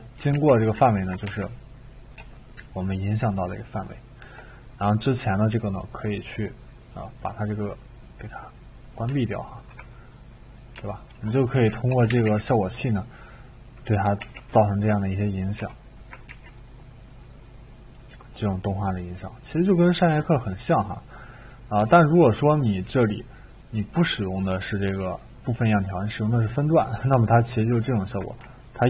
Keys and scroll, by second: 0.3-1.8 typing, 11.5-12.3 typing, 14.2-16.3 typing.